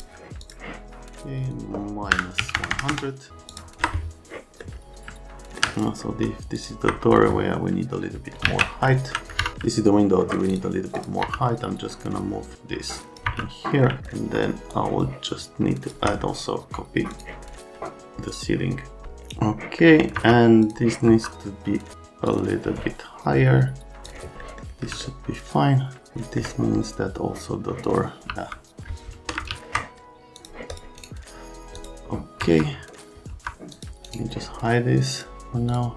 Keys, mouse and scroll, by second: 0.4 click, 1.4 click, 1.5 click, 2.1 KP_Subtract, 2.4 KP_1, 2.6 KP_0, 2.9 Return, 3.5 ctrl+click, 4.6 scroll down 1, 4.7 middle click, 6.5 middle click, 7.3 alt+middle click, 8.4 alt+q, 8.9 alt+middle click, 9.4 F3, 9.7 alt+middle click, 10.5 click, 11.0 click, 11.2 F3, 11.4 right click, 12.5 click, 13.3 F3, 13.8 scroll up 1, 13.9 right click, 14.7 shift+click, 17.1 middle click, 19.8 right click, 20.2 F3, 20.6 click, 21.1 F3, 22.3 middle click, 28.3 c, 29.5 ctrl+z, 30.3 click, 30.7 click, 31.7 click, 32.4 F3, 33.3 F3, 33.7 click, 34.0 right click, 35.1 click, 35.7 click.